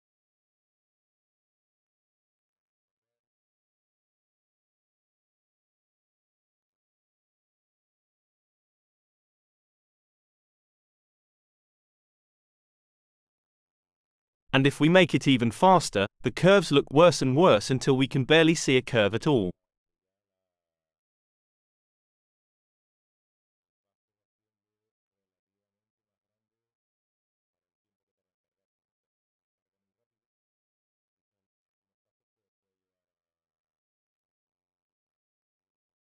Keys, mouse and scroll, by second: 1.2-6.5 drag, 7.5 click, 9.6 2, 10.2 Return, 11.5 click, 13.7 click, 15.1 2, 15.8 Return, 17.3-22.1 drag, 31.5 click, 33.7 click, 35.0 click, 35.6 click.